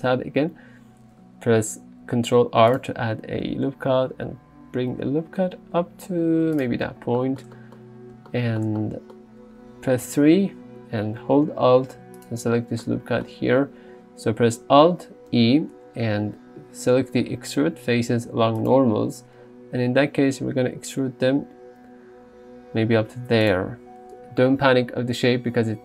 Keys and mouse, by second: 0.0 Tab, 2.2 ctrl+r, 2.8 click, 6.6 click, 10.1 3, 12.3 alt+click, 15.4 alt+e, 23.5 click.